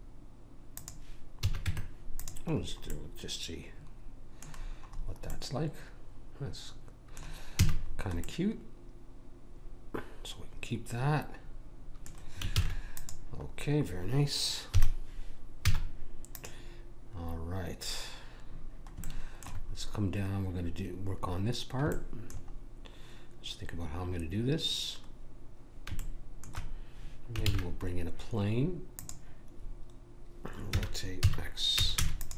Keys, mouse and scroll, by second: 1.4 a, 1.7 Tab, 2.7 middle click, 3.7 middle click, 5.3 middle click, 7.7 a, 12.5 ctrl+s, 14.7 KP_1, 15.6 z, 17.3-17.9 scroll up 1, 17.9-18.9 scroll up 1, 22.2-26.0 middle drag, 27.5 shift+a, 30.9 r.